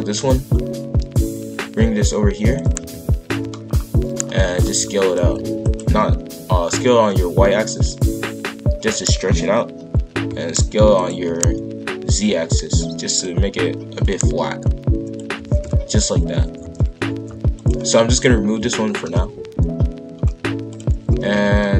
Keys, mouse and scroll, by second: 0.1 ctrl+l, 0.8 g, 2.7 KP_5, 2.9 KP_1, 3.6-4.1 scroll up 1, 4.1 shift+middle click, 4.5 scroll up 2, 4.7 s, 5.8 s, 10.0 s, 11.1 s, 14.0 click, 15.4 shift+f, 18.1 click, 19.0 ctrl+l, 19.5 Delete, 21.1 shift+f.